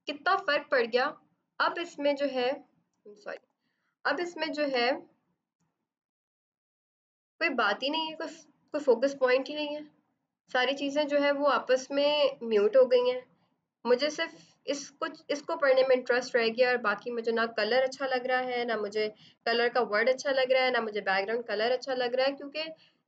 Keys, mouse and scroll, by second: 2.0 click, 3.2 ctrl+z, 4.6 typing, 5.4 click, 6.1 ctrl+d.